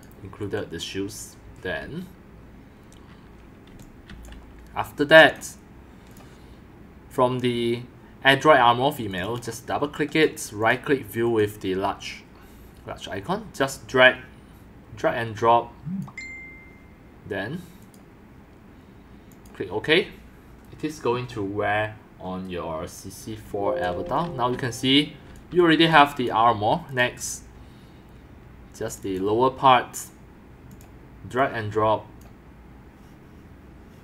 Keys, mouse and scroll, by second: 3.7 x, 4.1 c, 4.9 click, 6.1 click, 7.1 click, 9.1 click, 9.2 click, 10.1 click, 10.6 click, 11.2 click, 13.7 click, 17.8 click, 19.3 click, 19.7 middle click, 20.6 middle click, 20.9 middle click, 23.4-25.9 typing, 23.5 click, 24.1-25.3 drag, 25.6 click, 26.8 click, 28.9 click, 29.0 click, 30.7 click, 31.0 middle click, 31.3 click.